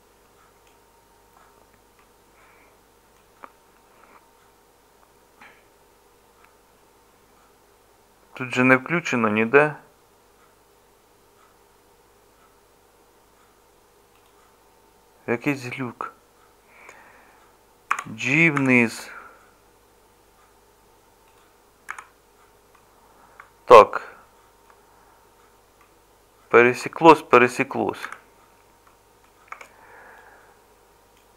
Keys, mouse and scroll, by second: 2.0-17.9 middle drag, 17.9 g, 21.9 z, 28.0 z, 29.5 Tab.